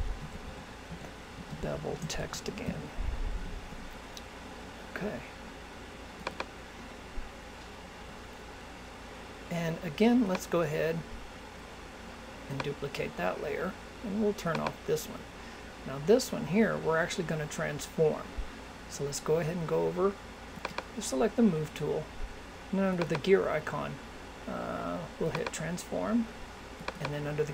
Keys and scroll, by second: 1.9 shift+t.